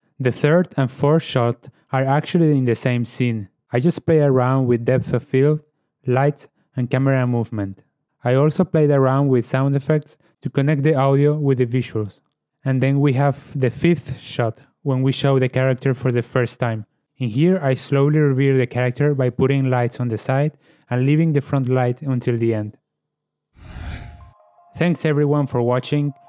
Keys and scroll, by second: 0.5 ctrl+space, 2.4 shift+space, 12.4 shift+space, 20.2 shift+space.